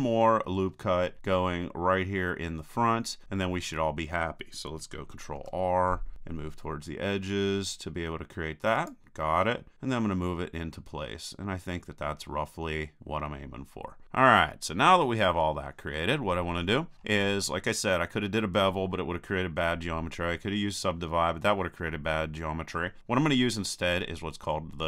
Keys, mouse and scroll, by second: 0.7-4.9 middle drag, 5.4 ctrl+r, 13.0-14.0 drag, 14.0-15.6 middle drag, 16.6-20.9 middle drag.